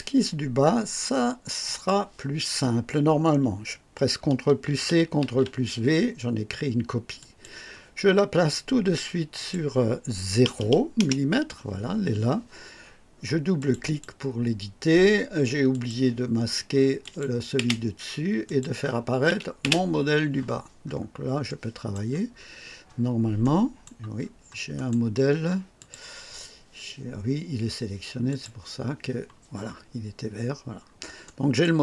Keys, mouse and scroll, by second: 1.6 click, 4.6 ctrl+c, 5.2 ctrl+v, 7.1 click, 9.3 click, 10.4 KP_0, 11.0 KP_Enter, 13.5 click, 15.7 click, 17.0 click, 17.5 typing, 18.4 click, 19.6 typing, 20.8-21.1 scroll up 1, 21.4 right click, 22.3-22.7 scroll up 1, 23.4-24.0 right drag, 24.1 scroll up 1, 24.7 right click, 25.7 click, 28.2 click, 30.8 scroll up 1, 31.2-31.8 right drag.